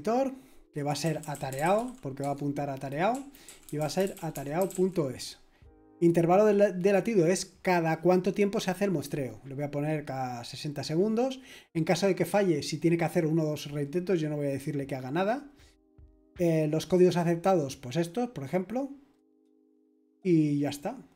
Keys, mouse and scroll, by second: 0.8-5.2 typing, 3.1 Right, 9.5-10.9 scroll down 1, 10.9-12.4 scroll down 1, 15.2-17.4 scroll down 2, 19.1-20.3 scroll up 2, 20.3-21.1 scroll up 1.